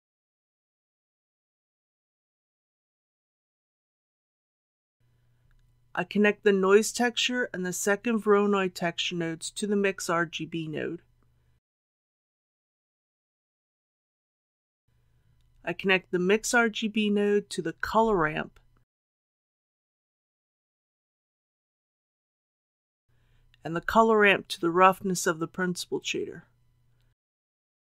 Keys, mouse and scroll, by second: 0.1 shift+a, 2.5-25.7 drag.